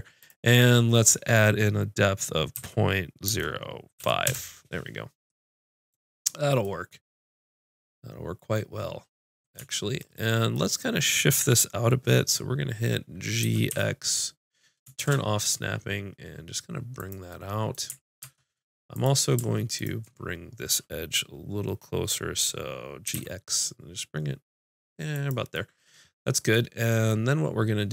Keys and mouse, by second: 5.3 middle click, 8.3 middle click, 9.0 middle click, 10.0-13.3 middle drag, 13.4 g, 18.2 ctrl+Tab, 19.8 click, 23.1 g, 25.5-26.6 drag, 26.7 click.